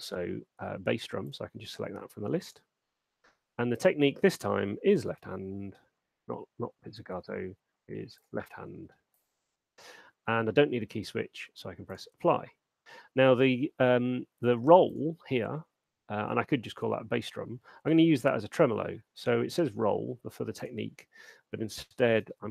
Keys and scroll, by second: 5.1-5.8 typing, 22.3 m.